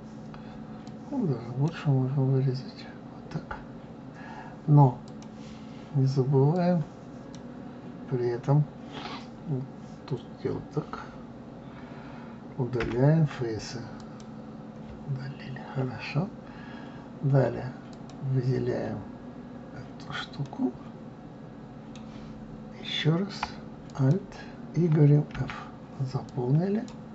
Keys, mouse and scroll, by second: 0.8 click, 5.0-6.7 drag, 15.3-15.9 scroll up 2, 15.9-16.6 scroll down 2, 16.6-17.5 scroll up 1, 17.9 click, 20.5-23.5 middle drag, 23.9 alt+click, 25.3 f, 26.3 click.